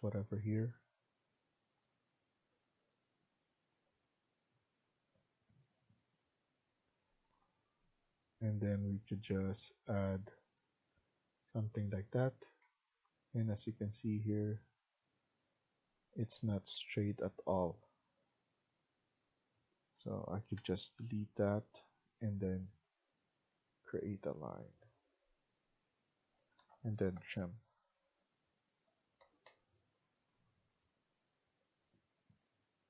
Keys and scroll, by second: 12.5 Escape, 12.9 Escape, 13.9 Escape, 16.3 Escape, 16.6 Escape, 19.3 Escape, 20.5 Delete, 26.3 Escape, 26.5 Escape, 26.6-27.6 typing, 29.1 Escape, 29.3 Escape, 31.1 Escape.